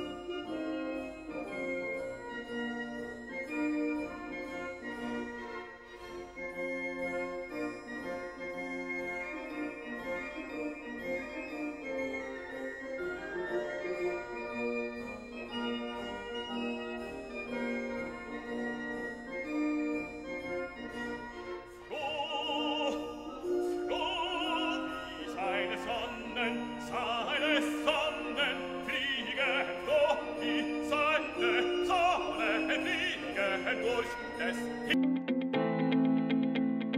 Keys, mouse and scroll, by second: 0.2-0.6 scroll up 1, 1.4 scroll down 1, 1.5 middle click, 2.3-5.2 drag, 23.0 click, 28.6 1, 28.8 Return, 30.4 click, 35.3 click, 35.4 F7, 36.9 F8.